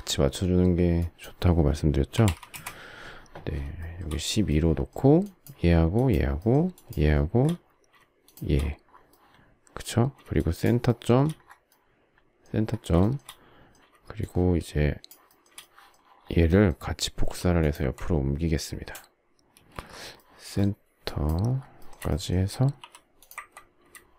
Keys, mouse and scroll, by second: 1.9-2.7 typing, 3.8 shift+middle click, 5.9 shift+click, 6.3 shift+middle click, 6.5 shift+double middle click, 6.7 shift+click, 7.4 shift+scroll, 8.2 shift+click, 10.4 shift+click, 10.8 shift+middle click, 13.0 shift+middle click, 14.2 shift+click, 15.2 shift+middle click, 17.2 m, 19.6 space, 21.0 shift+click, 21.5 shift+scroll, 21.8 shift+middle click, 22.8 m.